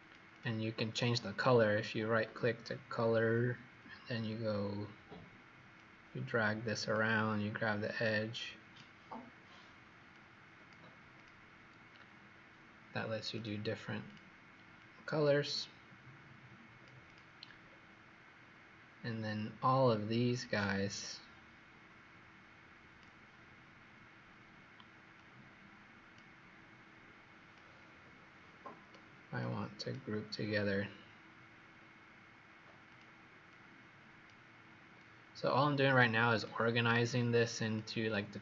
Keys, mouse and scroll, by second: 0.8 right click, 5.7 click, 13.3 click, 13.9 click, 17.5-18.3 scroll down 1, 18.3 scroll down 2, 20.4 click, 23.5-25.1 scroll down 1, 25.1 click, 30.7-31.7 scroll down 2, 31.7 middle click, 32.8 click, 33.4 click, 35.0 click.